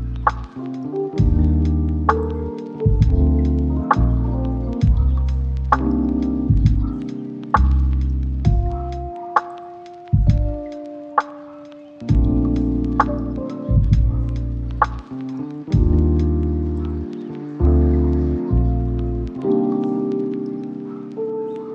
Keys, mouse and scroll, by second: 0.0-4.6 typing, 5.7 shift+middle click, 6.1-9.3 typing, 10.3 shift+middle click, 10.7-11.1 scroll up 2, 10.9 shift+middle click, 11.2 shift+middle click, 11.6 shift+click, 12.1 right click, 13.2 scroll down 1, 13.4 shift+middle click, 13.7 scroll down 1, 13.9 middle click, 15.0 scroll down 1, 15.9 right click, 16.5 scroll down 1, 17.1 1, 17.4 3, 18.2 shift+d, 18.9 ctrl+z, 19.8 alt+d.